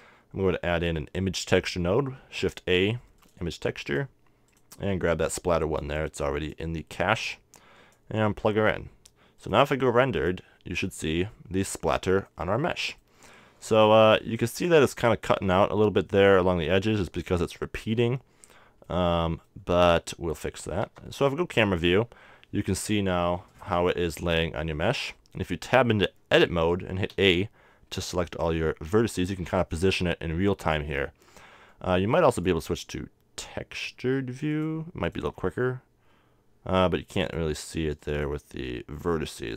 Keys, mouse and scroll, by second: 4.0-8.9 drag, 9.5-11.1 drag, 12.3-14.0 middle drag, 14.1-15.4 middle drag, 17.5-18.8 middle drag, 18.8-20.1 scroll down 1, 20.1-23.5 middle drag, 20.8 KP_0, 23.5-25.2 right drag, 24.2 Tab, 27.3 a, 29.5-31.4 drag, 31.6 middle click, 32.3-34.0 drag, 34.5-36.4 drag, 37.3-39.5 drag.